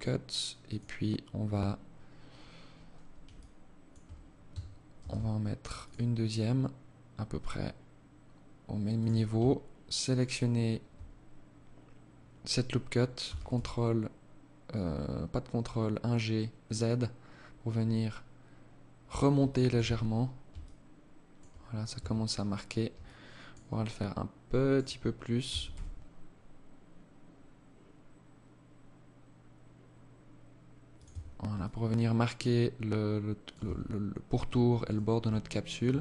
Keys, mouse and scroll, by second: 2.6 alt+click, 4.2 ctrl+r, 9.3 alt+right click, 12.4 g, 18.7 alt+click, 19.0 Tab, 19.8 alt+click, 21.2 Tab, 22.2 alt+click, 23.0 alt+click, 24.7 g, 30.2 Tab, 30.8 alt+click, 32.8 Tab, 33.2-33.5 scroll up 2, 34.0 alt+right click.